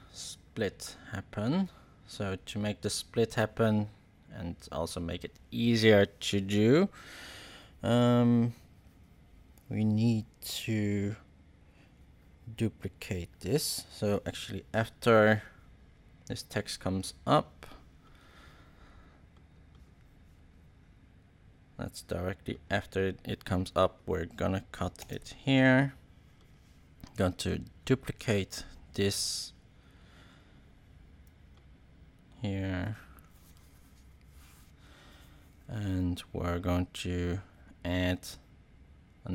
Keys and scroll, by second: 24.9 super+k.